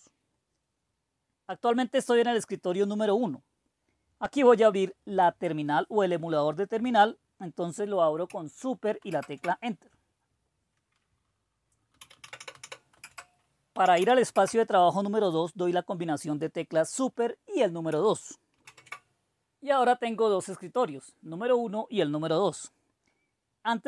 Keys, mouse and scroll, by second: 5.2-9.0 drag, 9.0 super+Return, 11.7-14.3 typing, 14.3 Return, 18.5 super+2.